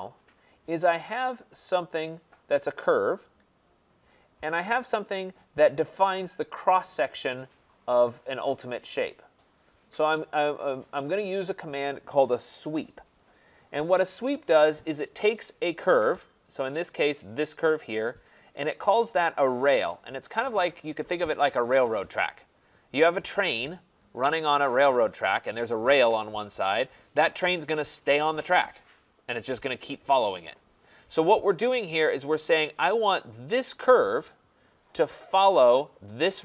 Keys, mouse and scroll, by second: 1.8 click, 4.5 click, 5.4 click, 13.4 click, 17.3 click, 18.0 click, 31.8 click, 33.6 click, 36.1 click.